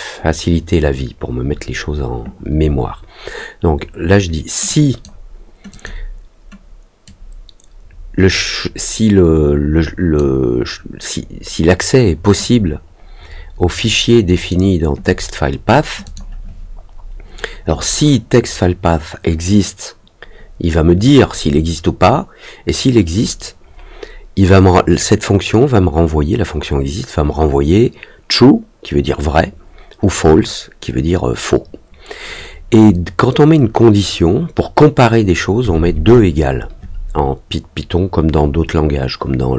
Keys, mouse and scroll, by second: 4.6 click, 5.6 click, 7.0-10.1 drag, 12.4-14.4 drag, 16.0 click.